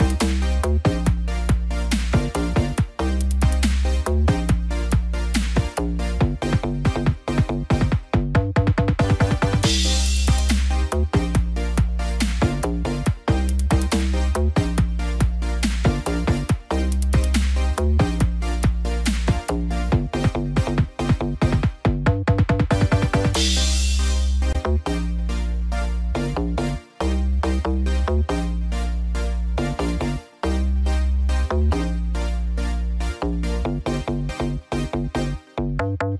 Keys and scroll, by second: 19.6 shift+F5, 21.5 ctrl+d, 25.7 ctrl+0.